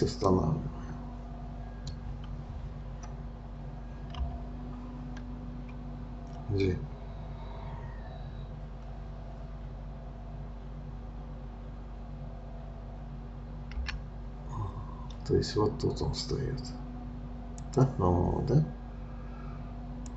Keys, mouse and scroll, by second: 13.8 g.